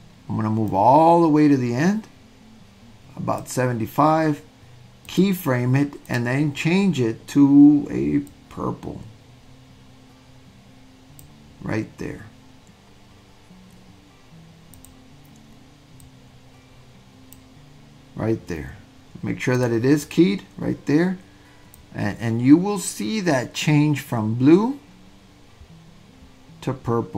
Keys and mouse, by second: 0.8-3.4 drag, 5.1 click, 6.0 click, 14.8 click, 19.5 click, 20.0 click, 21.8-27.1 drag.